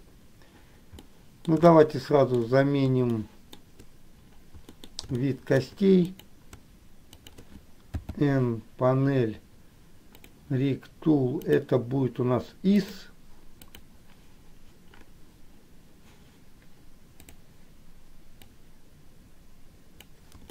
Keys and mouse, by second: 1.3 middle click, 2.4 shift+middle click, 3.2 shift+middle click, 4.9 middle click, 5.2 shift+middle click, 7.3 shift+click, 8.1 n, 10.3 click, 11.6-13.3 drag, 13.7 click, 17.4 click, 18.9-20.2 drag.